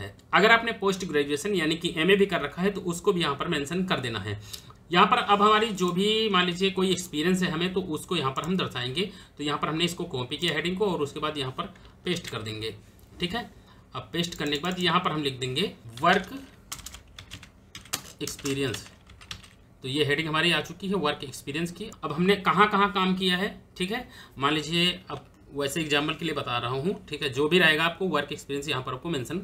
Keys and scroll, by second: 11.8 ctrl+v, 15.8-19.5 typing.